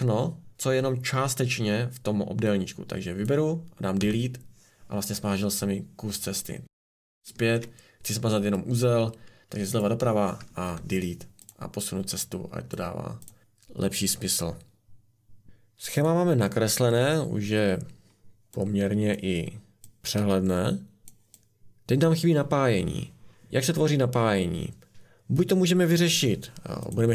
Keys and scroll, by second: 3.9 Delete, 7.2 ctrl+z, 10.6 Delete.